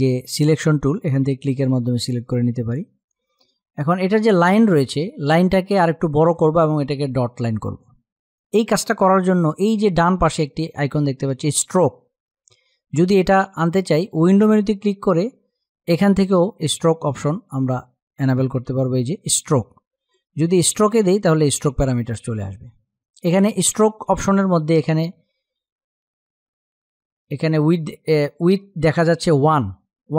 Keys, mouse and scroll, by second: 2.5 click, 13.7 click, 19.7 click.